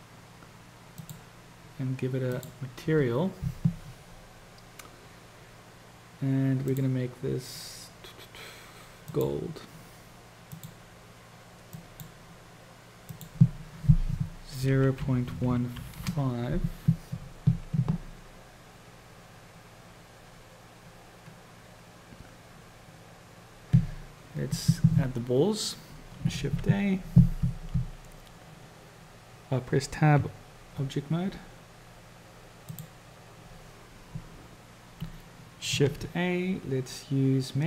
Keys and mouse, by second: 0.1 click, 1.1 click, 2.4-5.5 drag, 6.8-9.4 drag, 10.6 click, 13.3-17.6 drag, 26.6 shift+a, 30.1 Tab, 35.9 shift+a.